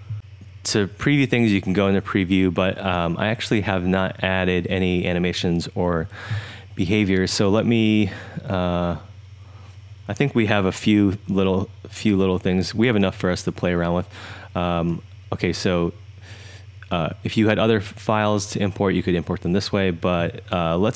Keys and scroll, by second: 10.0 3, 11.8 1, 12.3 1, 12.8 1.